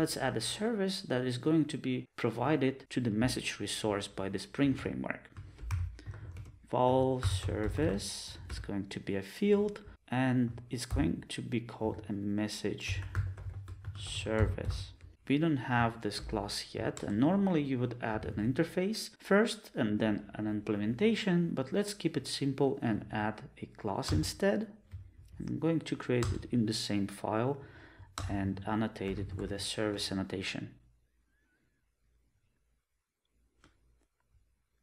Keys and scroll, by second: 17.0 alt+Return, 30.1 Return.